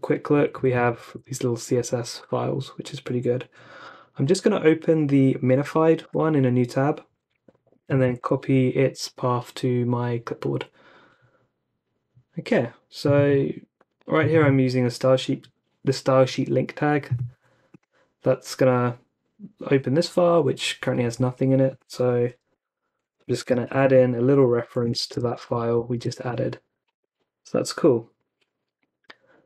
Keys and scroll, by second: 0.3 Down, 0.5-1.2 Down, 1.7 Down, 6.0 t, 8.2 typing, 22.5-25.8 typing, 25.9 super+v, 26.3 Escape, 26.9 super+s.